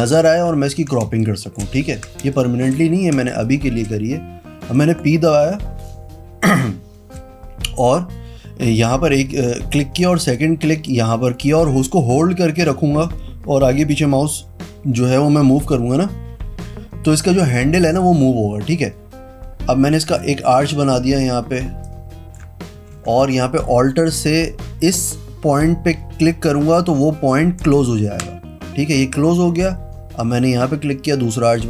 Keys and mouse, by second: 1.2 space, 1.3 click, 2.4 space, 3.5 click, 3.5 space, 4.9 click, 11.0 click, 13.9 click, 17.7-20.3 drag, 21.9 click, 22.9 ctrl+z, 27.7 alt+click, 30.4-31.6 drag.